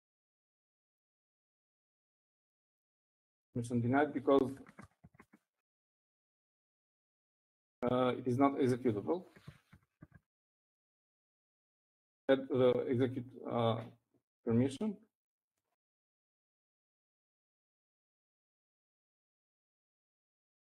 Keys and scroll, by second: 1.0-4.2 typing, 5.5-9.4 typing, 10.5-12.2 typing, 17.0-20.7 typing.